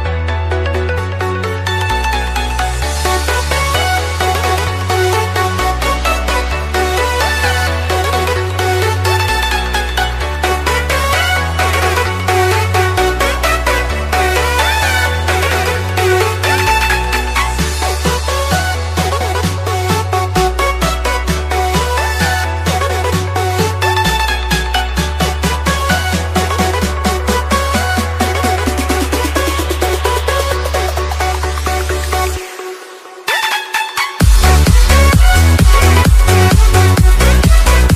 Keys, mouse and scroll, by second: 5.1 alt+scroll up 1, 5.2 alt+scroll down 1, 6.7 click, 11.2-12.4 scroll down 1, 12.4-14.1 scroll up 1, 14.1 click, 30.4-31.6 scroll down 1, 31.6 click, 37.1 alt+Tab.